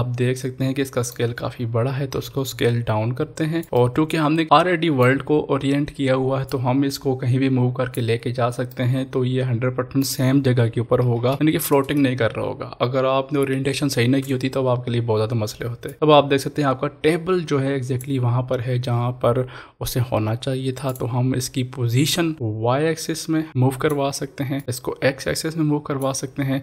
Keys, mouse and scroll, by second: 2.2 s, 3.6 click, 3.7-6.5 middle drag, 6.5-8.7 drag, 8.7-11.0 middle drag, 11.0 ctrl+s, 15.9-20.3 drag, 20.9-26.6 drag.